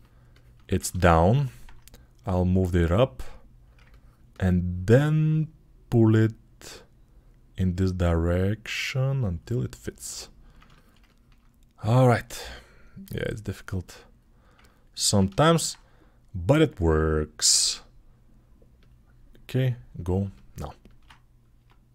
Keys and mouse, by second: 0.3-2.4 ctrl+alt+middle drag, 2.4-4.3 drag, 4.6-7.4 ctrl+alt+drag, 7.4-10.0 right drag, 10.0 ctrl+alt+click, 10.3 ctrl+alt+shift+click, 15.1 alt+shift+click, 16.2-18.7 drag, 18.7-20.2 middle drag, 21.4 Tab.